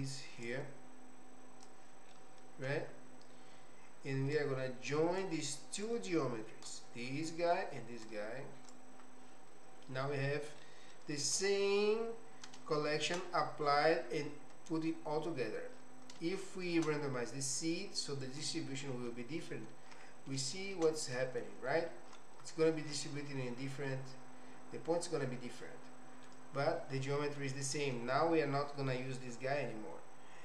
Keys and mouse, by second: 0.4-1.8 drag, 2.1 middle click, 4.4 click, 6.0 click, 8.1 click, 10.6 middle click, 12.7 shift+middle click, 16.3 shift+middle click, 18.2 click, 20.6 shift+middle click, 21.1 middle click, 23.8-26.3 middle drag, 27.2 middle click.